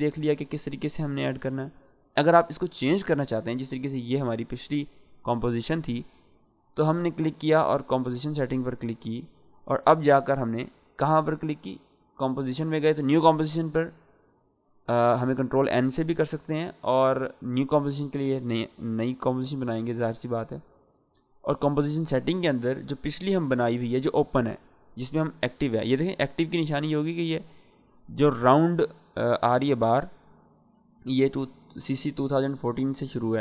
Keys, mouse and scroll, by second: 3.8 click, 11.0 click, 25.1 click.